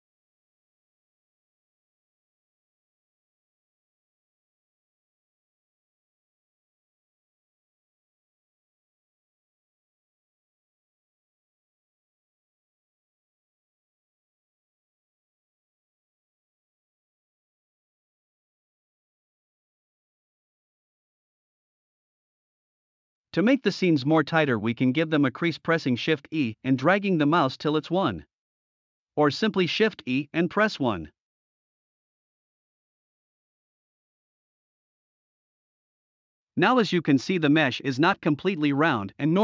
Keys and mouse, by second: 0.1-0.7 middle drag, 1.0-1.3 middle drag, 1.8 alt+z, 2.2 alt+z, 2.5 Tab, 2.7 middle click, 3.5-4.1 drag, 4.2 Tab, 4.7 alt+z, 5.2-6.1 drag, 6.2 alt+z, 6.6 middle click, 7.2 alt+z, 7.6 alt+z, 8.3-9.9 middle drag, 10.1-10.7 middle drag, 11.3-11.7 middle drag, 11.7 Tab, 12.1-13.3 middle drag, 14.3-14.7 middle drag, 15.2-15.8 middle drag, 16.2 middle click, 17.2 middle click, 17.7 Tab, 18.1 middle click, 18.8 alt+z, 19.1 middle click, 20.6 alt+z, 20.9 middle click, 23.3 shift+e, 29.4 shift+e, 30.5 1, 32.2 Tab, 33.1-33.5 middle drag, 34.0 middle click, 35.3 middle drag, 35.7 drag, 35.9 middle click, 36.2 middle click, 37.2-39.4 d, 37.6-39.1 drag.